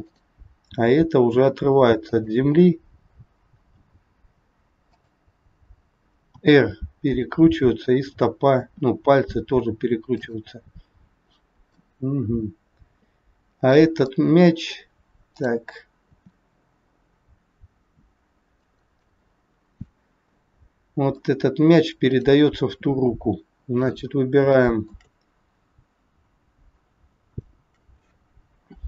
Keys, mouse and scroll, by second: 0.2 click, 0.6 g, 6.3 r, 7.6 click, 8.5 r, 11.8 middle click, 14.1 middle click, 15.3 click, 16.0 r, 19.0 middle click, 22.0 click, 24.0-24.4 scroll up 2, 24.5 shift+middle click, 27.1 shift+click.